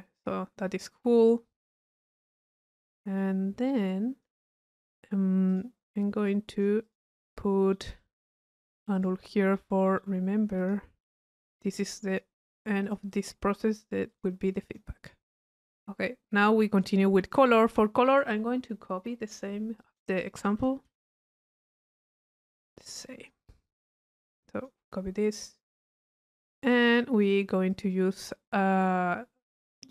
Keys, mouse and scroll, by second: 0.1 middle click, 0.7 click, 1.8-2.4 drag, 2.8 right click, 3.7 click, 5.5 click, 6.3 click, 7.2 right click, 8.0-9.3 drag, 9.4-10.6 right drag, 10.6 click, 11.2 u, 12.1 click, 12.9 click, 14.1 click, 15.6 click, 17.3 click, 18.2 click, 22.2 click, 23.1 click, 24.0-24.7 drag, 25.5 click, 26.4 middle click, 27.0 click, 29.8 right click.